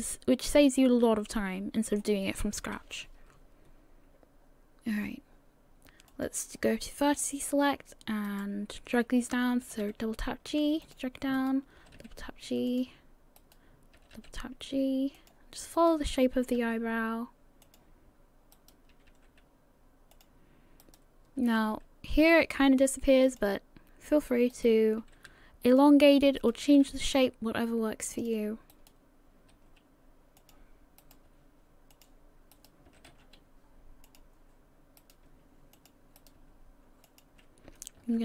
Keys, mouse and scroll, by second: 2.6 KP_3, 6.1 click, 6.7-7.1 scroll up 4, 7.3 shift+middle click, 8.3 right click, 9.6 g, 11.4 right click, 11.8 g, 13.4 right click, 14.0 g, 15.8 right click, 16.4 g, 18.5 right click, 18.9 g, 20.8 right click, 21.4 g, 24.5 right click, 24.8 g, 26.4 right click, 26.7 g, 28.7 right click, 29.5 g, 31.0 right click, 31.3 g, 32.5 right click, 32.9 r, 35.0 right click, 35.3 g, 36.2 right click, 36.4 g, 38.0 ctrl+r.